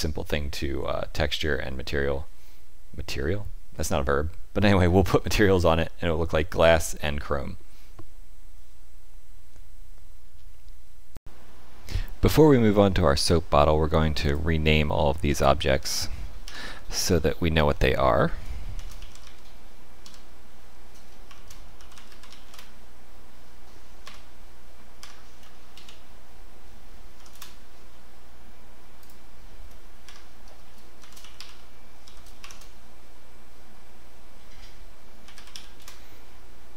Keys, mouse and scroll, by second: 14.2 click, 16.4 F2, 22.4 s, 24.9 F2, 28.9 click, 30.0 F2.